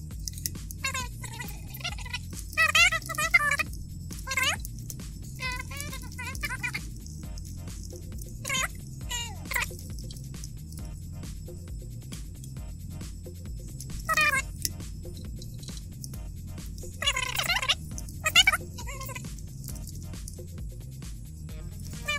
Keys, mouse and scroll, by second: 0.0-0.4 typing, 0.6 Up, 0.7 Down, 1.4 click, 1.8 click, 2.2-4.2 typing, 4.6 Left, 5.4-7.0 typing, 7.1 Delete, 7.4 Delete, 8.1 Down, 9.4-10.4 typing, 12.5 click, 13.0 click, 13.4 click, 14.0 è, 16.9 scroll up 2, 17.3 click, 18.0 e, 18.3 o, 18.6 BackSpace, 19.7 shift+i, 20.8 click, 21.1 click, 21.3 click, 21.7-22.1 typing.